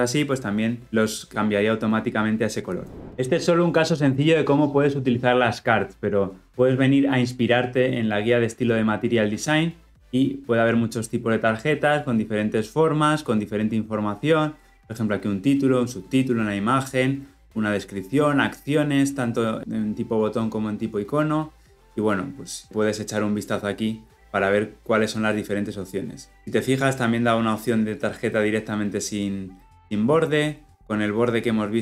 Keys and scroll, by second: 1.3 ctrl+alt+Left.